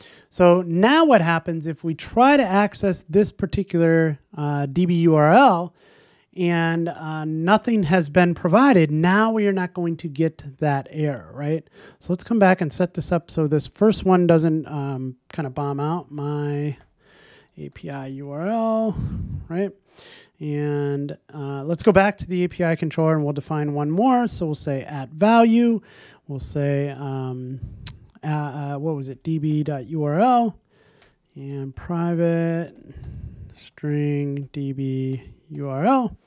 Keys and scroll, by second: 24.8 Return.